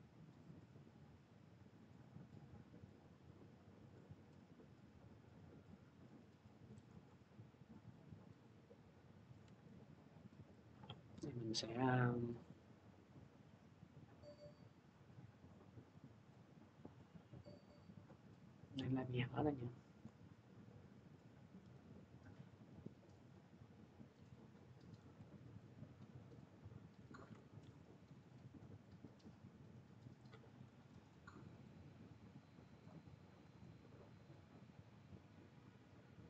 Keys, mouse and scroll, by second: 0.3-5.5 drag, 6.5 click, 6.6 ctrl+click, 6.8 ctrl+z, 9.1 click, 9.3 ctrl+z, 10.5 click, 11.0 r, 15.4 click, 18.5 click, 19.8 click, 21.4 c, 24.9 click, 25.2 ctrl+z, 26.7 click, 30.9 click, 32.6 click, 33.4 click.